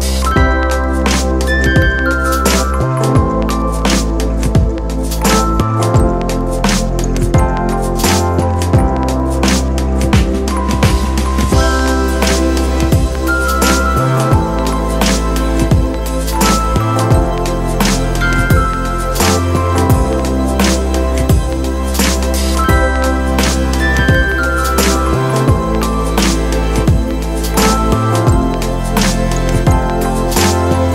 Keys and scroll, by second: 15.4 super+z, 16.5 super+z, 17.1 c, 19.3 space, 24.7 x, 25.0 z, 27.3 super+z, 27.4 x.